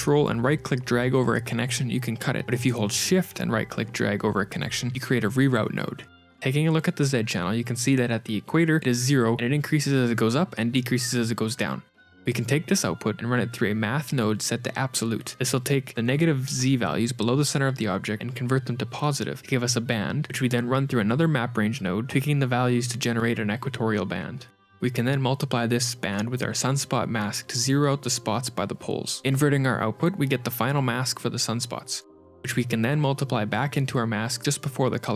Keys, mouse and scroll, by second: 0.3 ctrl+x, 1.0 ctrl+right click, 2.1 ctrl+z, 3.3 shift+right click, 4.3 click, 6.0 scroll up 5, 6.6 ctrl+shift+click, 6.7 ctrl+shift+click, 7.1 click, 7.4 middle click, 12.3 shift+a, 14.8 click, 20.6 shift+a, 23.1 shift+click, 25.2 g, 26.9 scroll down 3, 28.0 shift+a, 32.0 shift+click, 32.3 shift+f, 32.7 F2, 33.2 click, 33.5 click, 33.5 shift+d, 34.0 click, 34.6 ctrl+shift+click.